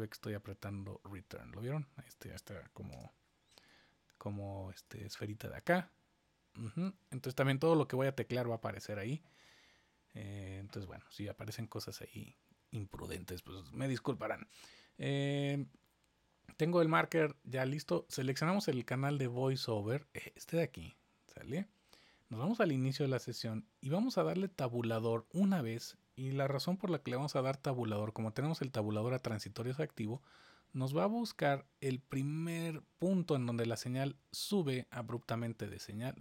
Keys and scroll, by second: 2.9 Return, 30.0 Tab.